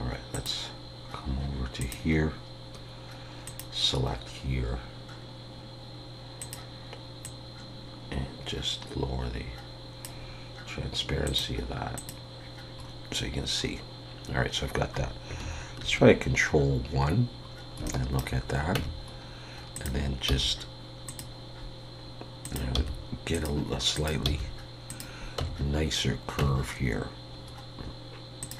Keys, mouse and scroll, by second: 0.3 click, 3.8-5.6 scroll down 3, 5.6-6.4 scroll down 3, 6.4 click, 11.2 click, 12.8 scroll up 2, 13.6 scroll up 2, 15.8 ctrl+1, 17.5 scroll up 2, 17.8 shift+middle click, 18.8 Tab, 19.1 scroll up 1, 19.7 click, 20.3 g, 22.4 click, 22.8 g, 23.9 click, 24.3 g, 25.4 Tab, 27.5 scroll up 1, 28.4 click, 28.4 scroll up 1.